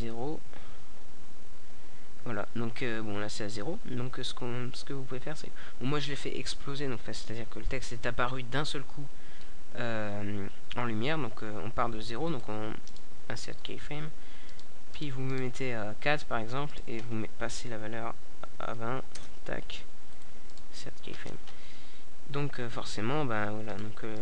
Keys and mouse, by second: 7.9-9.5 right drag, 9.5 middle click, 10.0-15.5 drag, 15.5-19.0 right drag, 19.0-24.2 drag.